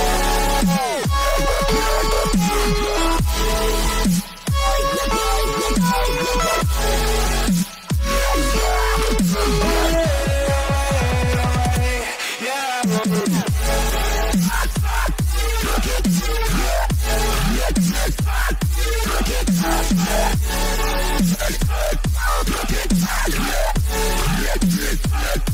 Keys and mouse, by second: 0.8 click, 7.8 click, 11.9-14.8 drag.